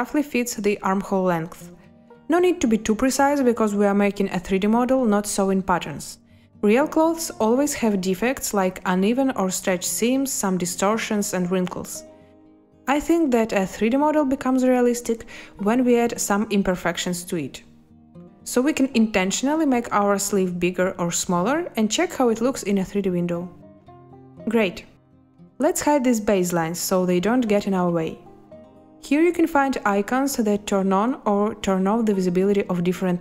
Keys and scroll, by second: 2.1 a, 6.4 z, 16.1 space, 24.5 space.